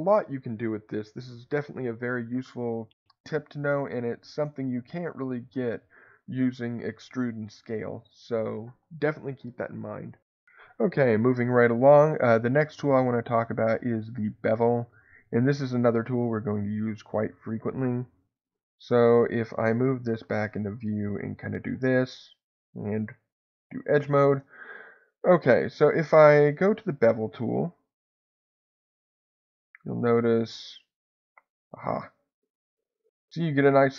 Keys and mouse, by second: 15.9 middle click, 19.1 shift+middle click, 21.6 alt+click, 23.4 click, 28.4-33.9 drag.